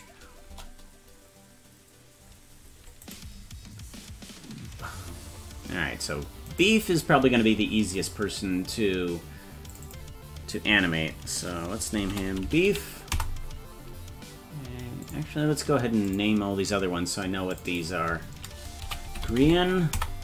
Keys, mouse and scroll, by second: 0.5 KP_0, 1.4-2.2 scroll up 1, 3.1 right click, 6.6-9.7 right drag, 9.7-13.7 drag, 12.4 e, 15.0 click, 16.0 click, 17.5-20.2 drag.